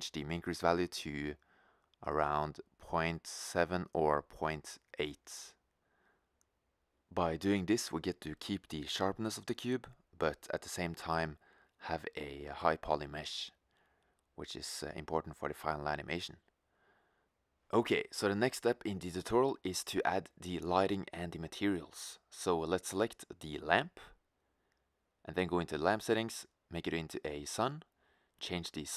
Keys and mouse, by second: 2.0 middle click, 3.2-4.2 middle drag, 7.6 Tab, 9.9-10.9 drag, 11.1-11.5 middle drag, 15.9 middle click, 24.0-25.6 right drag.